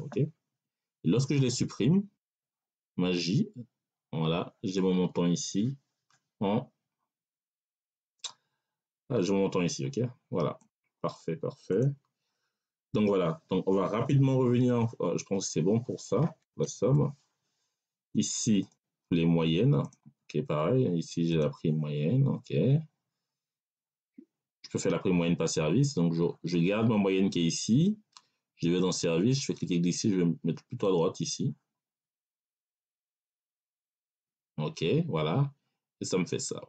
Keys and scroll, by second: 0.4 Delete, 16.5 ctrl+s.